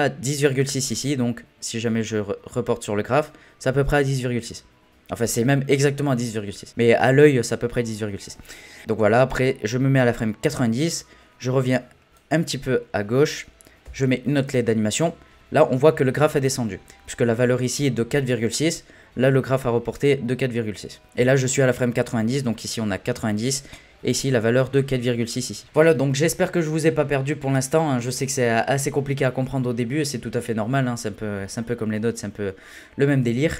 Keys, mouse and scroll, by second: 9.2-10.8 drag, 10.8-12.1 scroll down 5, 12.1-13.8 drag, 13.8 i.